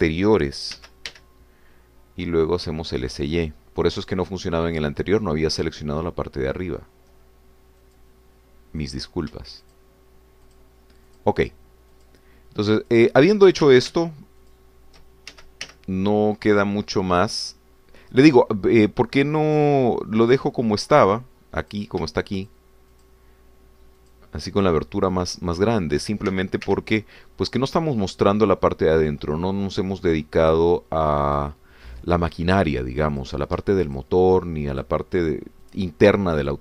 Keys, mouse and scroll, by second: 1.7 s, 2.1 y, 8.8 click, 10.0 click, 10.6 shift+click, 11.6 shift+click, 12.1 shift+click, 12.9 shift+click, 13.8 shift+click, 14.9 ctrl+z, 15.4 shift+click, 16.3 shift+s, 16.6 shift+y, 21.2 click, 22.6 click, 23.5 shift+click, 23.9 shift+click, 25.0 shift+click, 25.5 shift+click, 26.7 shift+click, 27.3 shift+s, 27.7 shift+y, 32.4 click, 34.1 click, 35.0 shift+click, 35.9 shift+click.